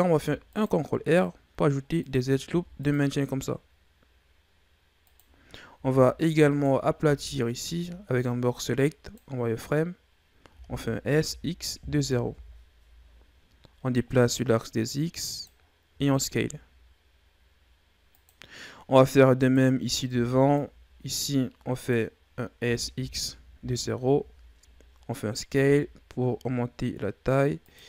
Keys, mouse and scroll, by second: 0.0 ctrl+r, 2.4 ctrl+r, 5.7 z, 6.4 right click, 6.9 b, 10.4 s, 13.8-15.8 drag, 15.8 s, 19.3 right click, 20.0 b, 22.5 s, 25.4 s.